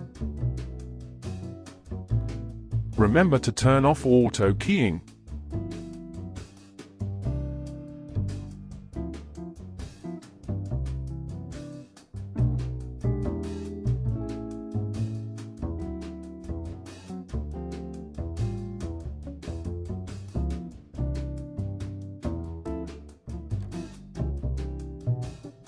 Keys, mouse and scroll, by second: 0.5-5.8 drag, 7.8-9.3 drag, 9.3 Delete, 10.8-16.1 middle drag, 16.1 n, 20.2-22.4 shift+middle drag, 22.4-25.6 drag.